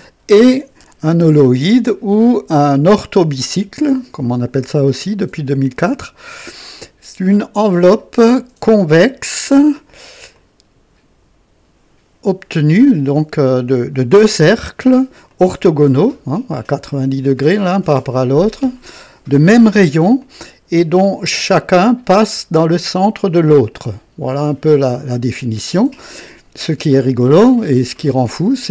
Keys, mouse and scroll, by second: 1.5-3.2 drag, 4.8-9.0 drag, 10.3-12.8 drag, 15.2 click, 17.0 click, 18.1 click, 20.1-21.7 drag, 22.0-22.7 drag, 24.6-25.9 drag, 27.0-28.7 drag.